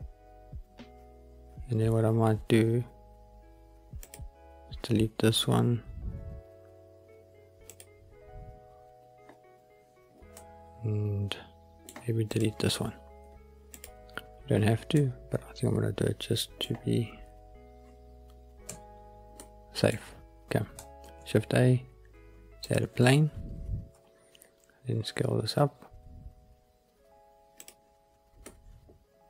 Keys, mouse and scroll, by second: 4.0 click, 7.1 Delete, 10.3-11.8 middle drag, 12.2 click, 13.2 Delete, 14.9-16.5 middle drag, 18.6 Tab, 19.3-19.8 middle drag, 20.0-20.7 scroll up 1, 21.0 shift+a, 23.9 s, 27.5 click, 28.3 scroll up 1, 28.4-29.2 middle drag.